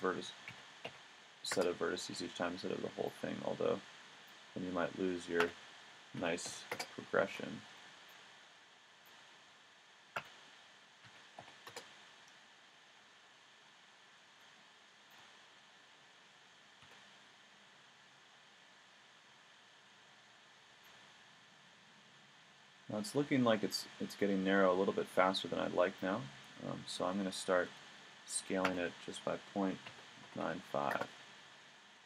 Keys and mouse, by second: 2.0 a, 2.6 b, 4.5 s, 7.2 a, 7.7 b, 9.3 s, 15.1 middle click, 16.8 a, 18.6 b, 27.7 s.